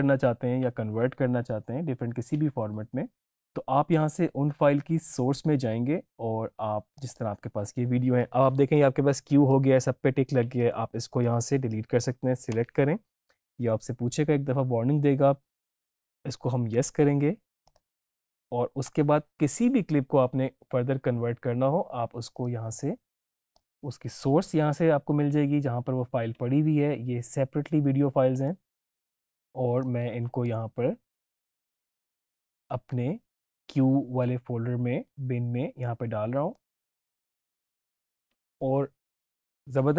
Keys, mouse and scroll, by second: 6.9-17.6 drag, 17.9 click, 22.3-25.8 drag, 28.3 click, 28.7-29.8 scroll down 1, 29.8-32.8 drag, 32.8-33.2 scroll down 1, 36.4-39.9 drag.